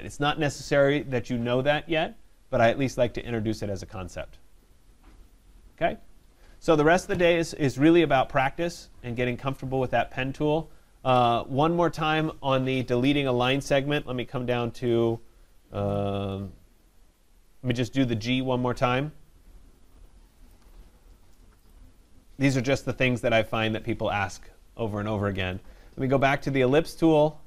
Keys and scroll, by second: 22.8 Delete.